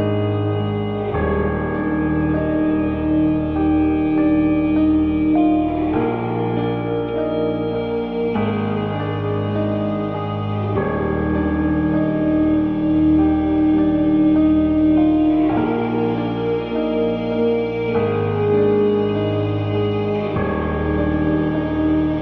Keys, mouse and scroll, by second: 0.0 KP_5, 3.0-6.3 drag, 17.4-22.2 drag.